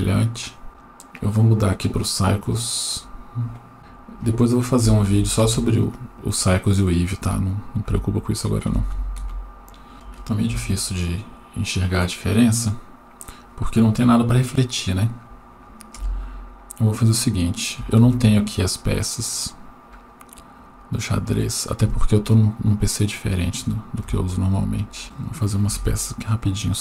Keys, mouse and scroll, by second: 0.7 middle click, 1.1-2.7 drag, 3.7-5.4 drag, 7.1-9.2 drag, 9.9 right click, 9.9 scroll down 4, 9.9 KP_7, 10.7 g, 14.4-15.3 middle drag, 16.0 KP_0, 17.0-17.5 scroll up 2, 17.5 scroll down 1, 18.0 shift+a, 24.0 KP_1, 25.0-25.5 scroll up 2, 25.3 shift+middle click, 25.7 g.